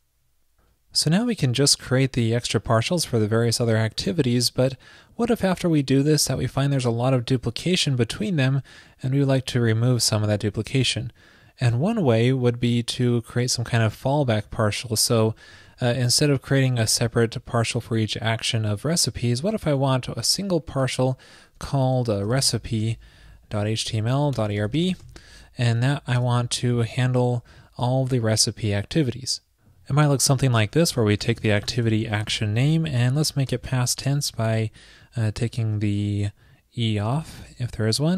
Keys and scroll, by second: 32.6 ctrl+shift+>.